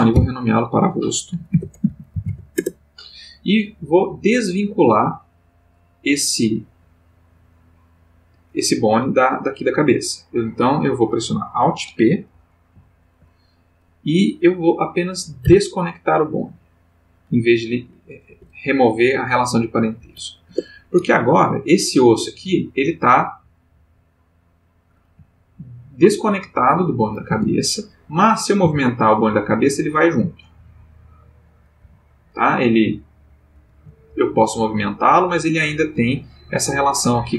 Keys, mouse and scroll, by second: 0.1 F2, 1.5-2.3 typing, 2.6 shift+Return, 12.7 alt+p, 15.4 Down, 18.3 Up, 19.9 Down, 20.5 Return, 22.4 g, 23.0 click, 25.1 g, 26.8 click, 27.4 Tab, 27.9 click, 28.6 r, 31.1 click, 31.6 click, 31.8 g, 32.8 click, 33.4 click, 33.7 g, 35.1 click, 35.8 click, 35.9 g, 37.0 click.